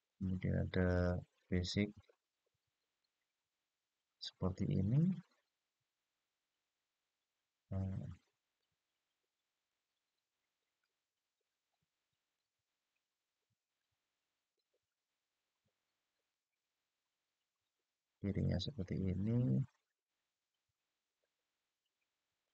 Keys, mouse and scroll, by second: 2.5 click, 4.8-9.4 middle drag, 10.6-12.1 drag, 13.5 click, 14.8-15.3 scroll up 2, 16.0-18.4 middle drag, 18.7-19.6 scroll down 3, 22.2 click.